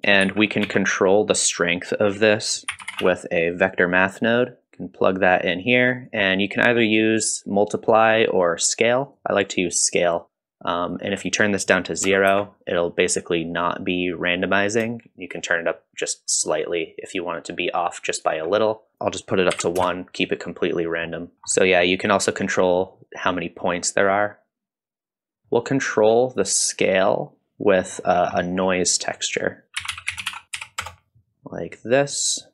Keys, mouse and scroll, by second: 0.2 shift+a, 4.6 click, 6.0-9.2 drag, 10.2 shift+click, 11.3-12.7 drag, 15.0-18.2 shift+drag, 18.7 middle click, 18.9-20.3 drag, 20.8 middle click, 21.3 click, 21.3 scroll down 1, 21.5 middle click, 22.9-25.4 drag, 25.4 middle click, 25.8-26.4 drag, 26.6-27.9 drag, 28.1 scroll down 2, 28.4 middle click, 29.2 click, 29.6 middle click, 29.6-30.3 scroll up 1, 29.6 shift+a.